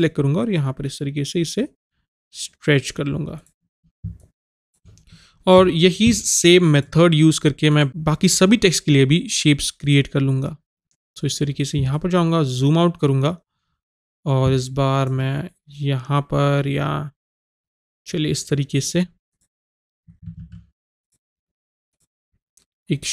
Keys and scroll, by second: 20.4 ctrl+z.